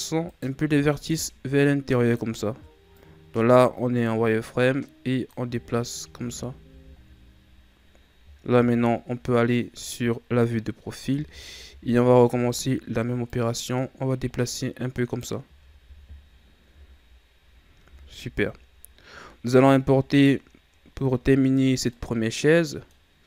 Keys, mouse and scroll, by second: 0.2 right click, 0.7 b, 2.9-5.5 drag, 5.5 z, 6.2 Tab, 6.7 a, 7.0-8.4 scroll down 3, 8.4 KP_3, 10.3-10.9 scroll up 2, 11.1 Tab, 11.7 z, 12.2-13.2 scroll up 2, 13.2-15.4 drag, 15.4 z, 16.6 KP_1, 17.9 Tab, 18.7-19.7 scroll down 4, 19.7-23.2 middle drag.